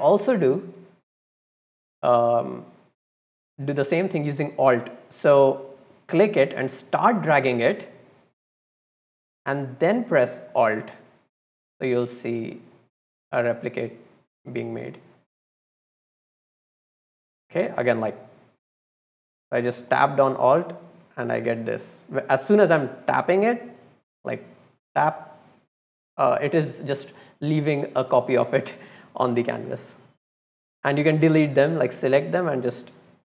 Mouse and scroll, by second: 0.1-0.6 middle drag, 6.0-14.6 drag, 15.6-16.4 drag, 16.9-17.5 drag, 18.1-19.1 drag, 19.4 middle click, 19.5 scroll down 1, 19.7 scroll up 1, 20.2-21.3 drag, 21.7 scroll down 1, 22.1 scroll up 1, 22.7-25.6 drag, 26.1-26.5 drag, 27.9 click, 29.2 drag, 30.4-30.7 drag, 32.5 drag.